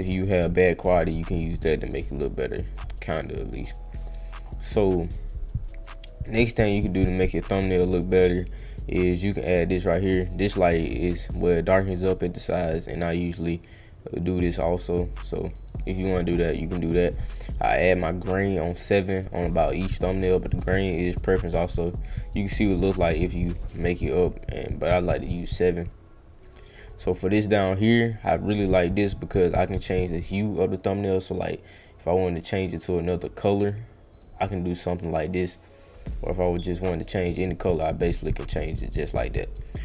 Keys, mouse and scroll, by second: 0.0 right drag, 2.7 middle click, 4.1 middle click, 7.1-7.6 right drag, 9.4-11.3 drag, 13.0-15.7 drag, 17.5 click, 21.2-26.5 drag, 28.9-34.2 drag, 36.3-39.8 drag.